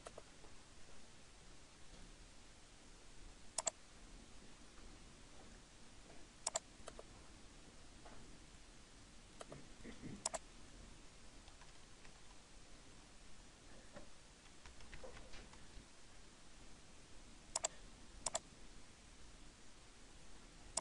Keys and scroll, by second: 11.7 Return.